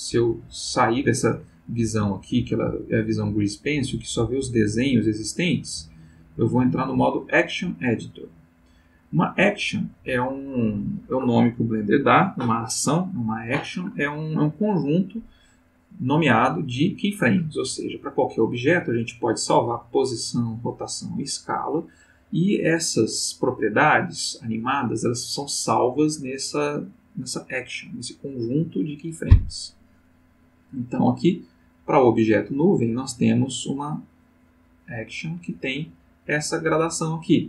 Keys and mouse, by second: 5.3 click, 8.0 click, 30.1-37.3 drag.